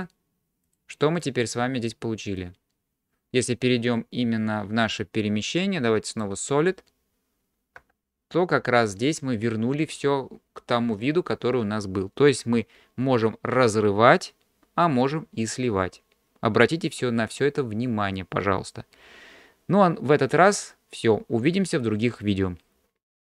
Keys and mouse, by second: 0.7 click, 1.2 click, 6.1 click, 7.8 g.